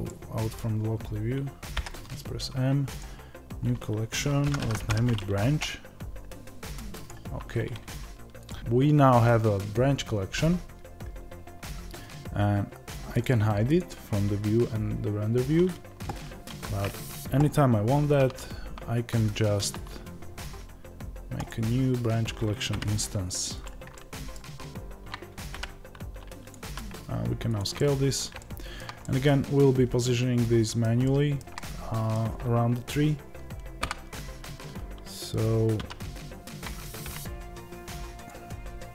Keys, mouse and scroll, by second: 0.0-21.4 middle drag, 21.4 shift+a, 23.6 click, 23.9 middle click, 24.5 scroll up 1, 24.6 click, 25.5 g, 26.4 click, 26.6 s, 27.5 click, 27.7-38.2 middle drag, 33.7 KP_7, 38.2 click.